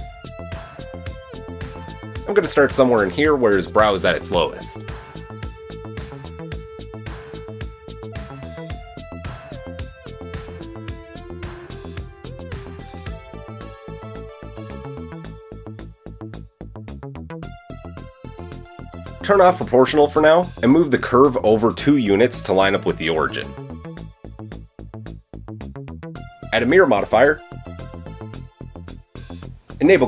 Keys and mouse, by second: 1.7 g, 9.9-10.8 drag, 10.8-17.5 middle drag, 10.8 g, 15.8 KP_1, 18.4-20.5 middle drag, 18.7 Tab, 20.5-22.5 drag, 22.5-27.1 middle drag, 22.9 g, 27.1 click, 27.2-27.8 middle drag, 27.8-30.0 drag.